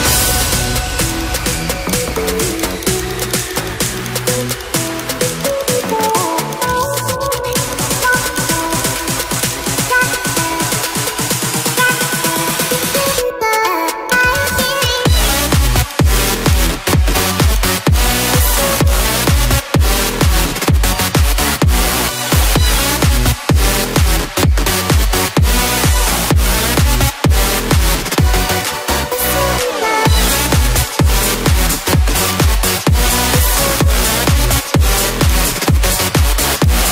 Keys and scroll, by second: 31.6 ctrl+alt+z.